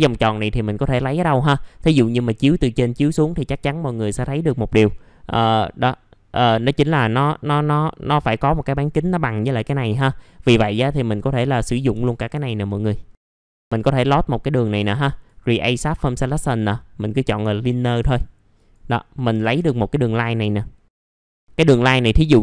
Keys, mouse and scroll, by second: 1.1 middle click, 4.7-5.0 scroll up 1, 5.0 middle click, 10.3 scroll down 1, 10.6 alt+scroll up 1, 11.3-11.6 scroll up 1, 11.6 click, 11.9 F4, 12.4 alt+middle click, 12.9-13.5 scroll up 2, 13.5-16.2 drag, 19.6-20.9 scroll down 1, 20.9 click.